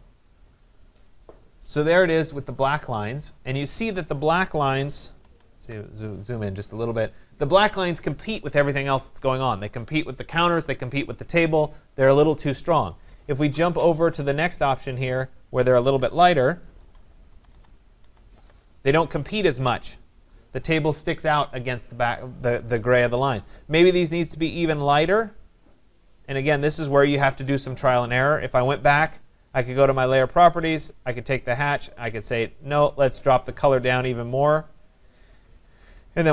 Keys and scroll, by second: 5.2 ctrl+=, 16.8 ctrl+-, 17.3 ctrl+=.